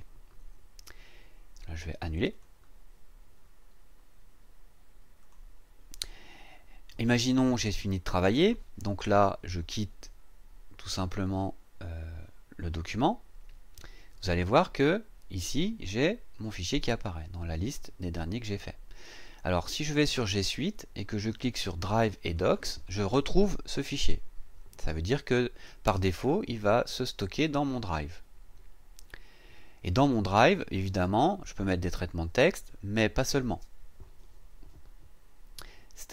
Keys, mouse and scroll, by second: 2.3 click, 5.2 click, 11.2 click, 20.1 click, 22.2 click.